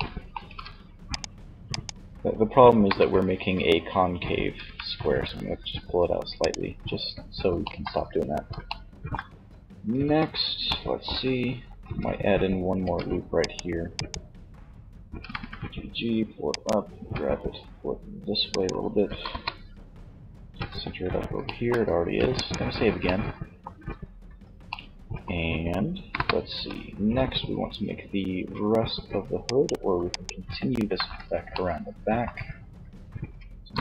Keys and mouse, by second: 1.9 KP_1, 3.5 g, 5.8 click, 9.3 z, 10.7 z, 12.0 ctrl+r, 13.3-15.0 drag, 14.3 g, 15.8-17.5 drag, 16.1 g, 17.9 click, 18.5 KP_3, 19.8 z, 21.3 ctrl+s, 23.1 z, 25.1 KP_1, 25.7 z, 30.0 z, 32.6 KP_3.